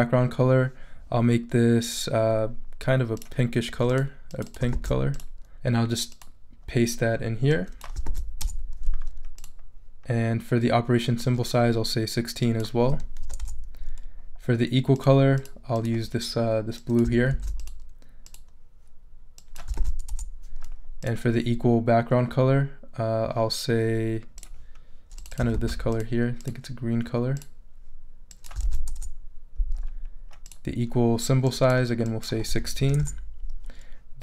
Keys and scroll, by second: 4.7 super+c, 8.0 super+v, 8.4 super+Return, 9.1 Return, 12.9 l, 13.2 6, 13.4 Return, 17.3 super+c, 19.8 super+v, 20.1 super+Return, 20.9 Return, 25.5 super+c, 28.6 super+v, 28.9 super+Return, 29.8 Return, 32.5 i, 32.8 6, 33.0 Return.